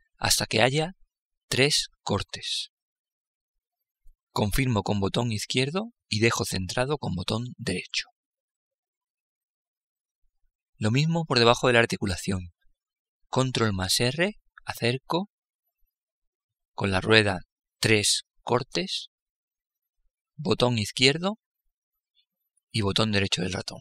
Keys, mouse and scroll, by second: 13.2 ctrl+r, 23.2 middle click.